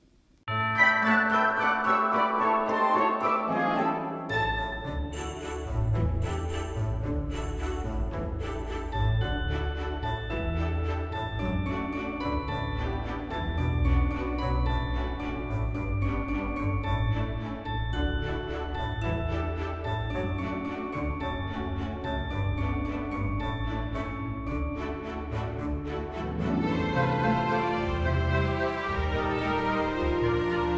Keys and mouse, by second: 0.5 g, 0.7 z, 3.4 click, 4.1 middle click, 4.3 s, 4.5 x, 7.5 click, 7.9 g, 8.1 x, 9.6 click, 10.3 s, 10.5 x, 11.8 click, 13.4 middle click, 15.8 F6, 16.6 middle click, 17.1 shift+a, 18.0 click, 18.9 g, 19.1 z, 20.0 click, 20.4 s, 21.2 click, 21.4 g, 22.1 y, 23.2 click, 23.6 g, 23.8 z, 24.4 click, 24.7 g, 25.2 x, 26.3 g, 26.6 y, 27.8 click, 28.2 Tab, 28.6 shift+middle click, 29.6 alt+z, 30.1 click.